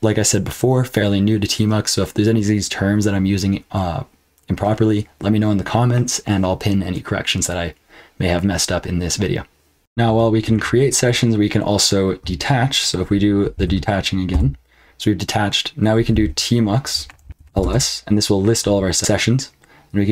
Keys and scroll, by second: 9.8 F12, 10.0 BackSpace, 10.5 BackSpace, 13.5 ctrl+b, 14.3 d, 15.9-17.9 typing, 19.9-20.1 typing.